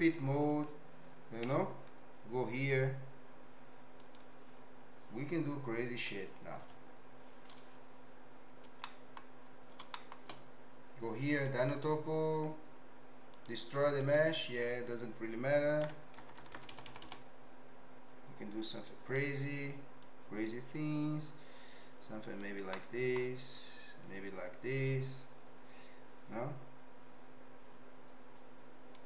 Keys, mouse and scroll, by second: 1.5 t, 4.0 click, 6.6 KP_5, 8.8 middle click, 9.9 shift+middle click, 11.4 click, 13.5 click, 15.9-17.1 typing, 17.1-19.1 drag, 20.0-22.4 drag, 22.7 middle click, 23.4-29.0 drag.